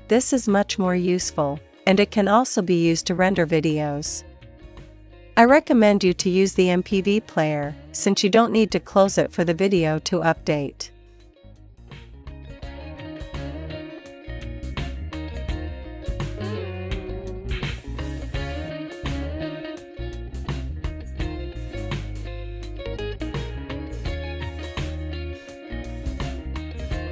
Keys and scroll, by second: 4.3-5.4 typing, 6.5 super+s, 21.6 ctrl+l, 22.5 Up, 23.6 Return, 25.6 space.